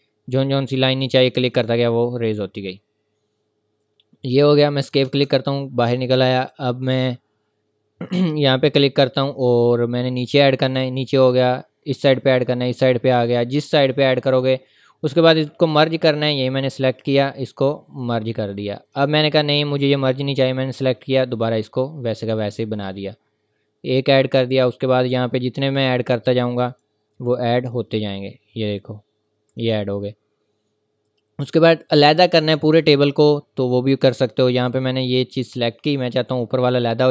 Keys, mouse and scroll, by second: 4.8 click, 4.8 Escape, 6.4 click, 15.6 click, 34.1 click.